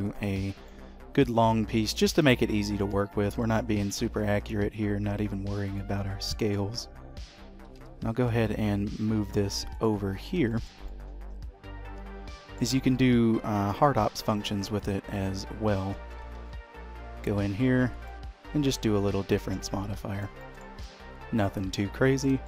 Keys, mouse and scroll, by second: 0.5-1.4 scroll down 4, 0.8 middle click, 2.9 click, 3.2-3.6 scroll up 3, 3.6 shift+middle click, 4.1 r, 6.1 middle click, 6.9-7.7 scroll up 2, 7.7 g, 10.3-10.6 scroll up 3, 10.6 shift+middle click, 11.0 middle click, 13.8 shift+click, 14.4 q, 16.4 shift+q, 18.8 middle click, 20.0 h, 20.2-20.5 scroll down 3, 20.5 shift+middle click, 21.0 middle click.